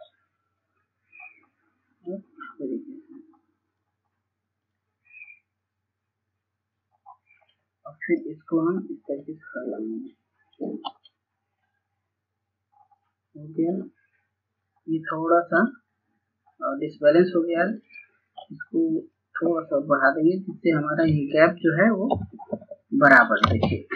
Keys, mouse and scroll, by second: 0.2-1.4 scroll down 1, 1.4-3.5 drag, 5.1 scroll down 1, 5.7 scroll up 1, 6.2 scroll down 1, 6.8-8.4 drag, 10.9-11.4 scroll down 1, 11.4-11.9 scroll up 1, 12.9-20.7 drag, 21.4 Right, 21.6 Right, 21.8 Right, 21.9 Right.